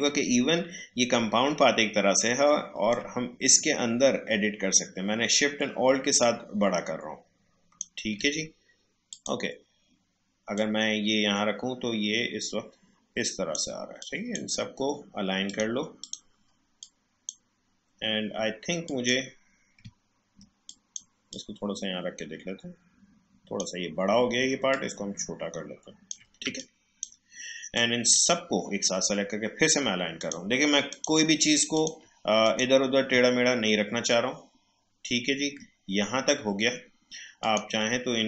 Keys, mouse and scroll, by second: 2.9-18.8 drag, 20.0-20.4 alt+scroll down 1, 20.6-24.7 drag, 26.4 space, 26.6 click, 26.9 space, 27.7-30.2 drag, 33.4 alt+scroll up 1, 34.8 alt+scroll down 1, 37.4 click.